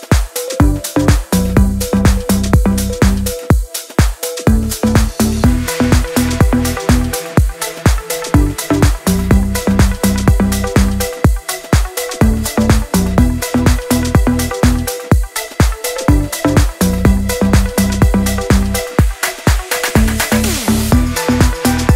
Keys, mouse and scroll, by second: 0.8 click, 2.6 scroll down 1, 2.9 scroll up 1, 3.4 shift+F4, 3.8 click, 6.2-11.5 drag, 12.0 ctrl+t, 12.9 click, 18.8-21.0 shift+drag, 21.0 ctrl+c, 21.6 click.